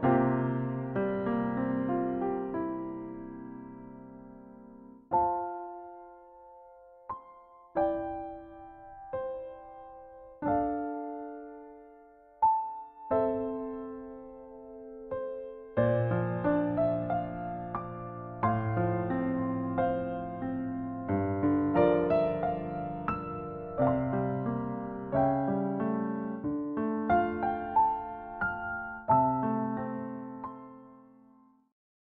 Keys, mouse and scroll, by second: 11.4 scroll down 1, 12.0-12.5 scroll up 2, 13.3 click, 13.3-26.9 typing, 13.3 click, 13.6 click, 13.7 scroll down 1, 13.8 click, 13.9 click, 14.0 click, 14.1 click, 14.1 click, 14.4 ctrl+z, 14.5 click, 14.5 click, 14.6 ctrl+z, 14.6 click, 14.7 click, 14.7 ctrl+z, 14.7 click, 15.0 click, 15.0 click, 15.3 click, 15.3 click, 15.6 click, 15.7 click, 15.8 click, 15.9 click, 16.2 click, 16.5 ctrl+z, 16.6 click, 16.6 ctrl+z, 16.6 click, 17.0 click, 17.1 click, 17.2 click, 17.6 click, 17.9 click, 18.1 click, 18.3 click, 18.3 click, 18.4 click, 18.5 click, 18.6 click, 18.8 click, 19.0 click, 19.1 click, 19.2 click, 19.4 click, 19.5 ctrl+z, 19.5 click, 19.8 click, 19.8 click, 19.8 scroll down 1, 19.9 ctrl+s, 20.0 click, 20.1 click, 20.3 ctrl+z, 20.3 click, 20.3 click, 20.5 ctrl+z, 20.5 click, 20.6 click, 20.7 click, 20.8 ctrl+z, 20.9 click, 20.9 click, 21.1 click, 21.1 click, 21.2 click, 21.2 ctrl+z, 21.3 click, 21.3 click, 21.6 click, 21.8 click, 21.9 click, 21.9 click, 21.9 scroll down 1, 22.0 click, 22.3 ctrl+z, 22.3 click, 22.5 click, 22.7 click, 22.9 click, 22.9 click, 23.1 ctrl+s, 23.1 scroll down 7, 23.2 click, 23.4 click, 23.5 click, 23.7 click, 24.0 click, 24.4 click, 24.8 click, 25.0 click, 25.2 ctrl+z, 25.2 scroll down 1, 25.3 click, 25.5 click, 25.5 scroll up 1, 25.5 ctrl+z, 25.5 click, 25.6 click, 25.7 scroll down 1, 25.7 click, 25.8 ctrl+z, 25.9 click, 26.2 click, 26.2-26.5 scroll up 3, 26.3 click, 26.5 click, 26.7 click, 26.7 shift+click, 26.7 shift+click, 26.8 ctrl+f, 26.9 ctrl+s, 26.9 right click, 28.4 a, 28.6 a, 29.9 ctrl+s.